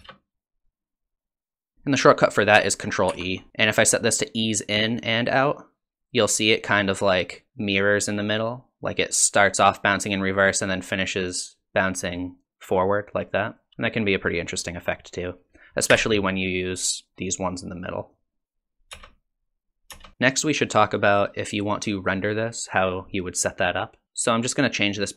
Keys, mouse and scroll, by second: 0.0 space, 3.1 ctrl+e, 6.9 click, 13.7 space, 14.9 click, 15.9 t, 18.9 space, 19.9 space, 24.0 click.